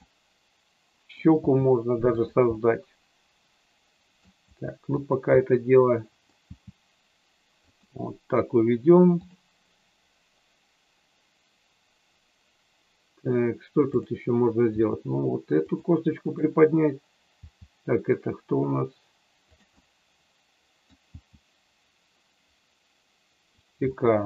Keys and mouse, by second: 0.1-1.2 middle drag, 1.4 g, 2.1 click, 2.6-4.2 middle drag, 4.4 g, 4.9 click, 5.3-6.3 middle drag, 6.4 g, 7.7 click, 13.9 click, 14.8 g, 15.6 click, 16.2 click, 17.3 g, 19.7-20.8 middle drag, 21.1 g, 23.4 click, 23.9 middle click.